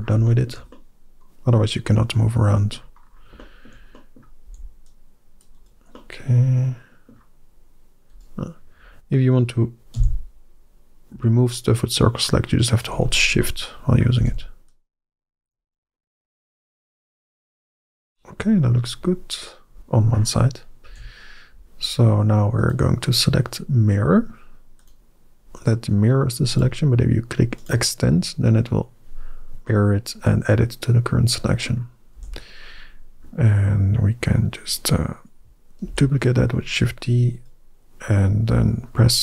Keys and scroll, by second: 4.3 c, 9.8 c, 14.0 c, 20.7 KP_1, 32.0 KP_1, 35.7 shift+d.